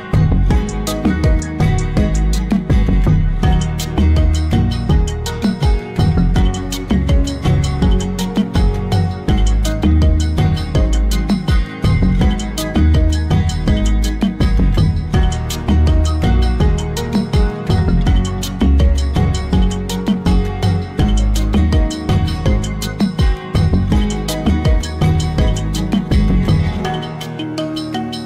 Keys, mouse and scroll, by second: 2.2 scroll down 1, 3.7 click, 6.3 click, 7.3-10.9 drag, 14.9-15.7 middle drag, 15.7 click, 19.6 click.